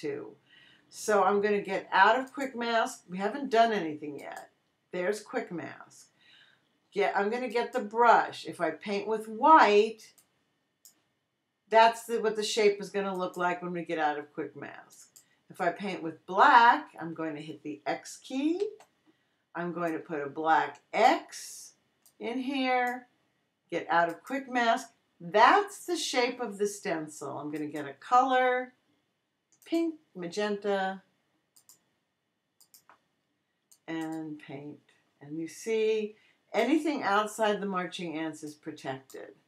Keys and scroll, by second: 18.6 x.